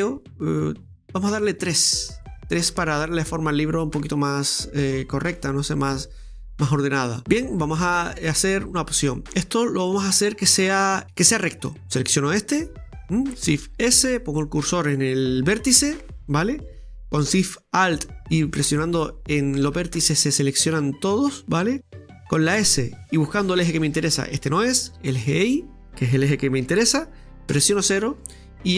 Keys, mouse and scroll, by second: 2.9-6.1 middle drag, 7.2-7.5 scroll down 1, 7.6 right click, 11.0-12.7 middle drag, 13.6 shift+s, 18.4 alt+shift+right click.